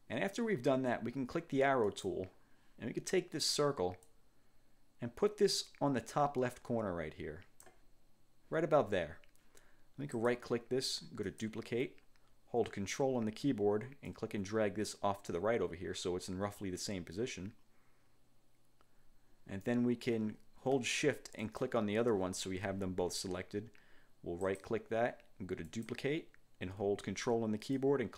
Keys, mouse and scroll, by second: 2.0 click, 4.2-7.9 drag, 10.3 click, 11.4 click, 14.2-16.9 ctrl+drag, 21.5 shift+click, 24.5 click, 25.8 click, 27.8-28.1 ctrl+drag.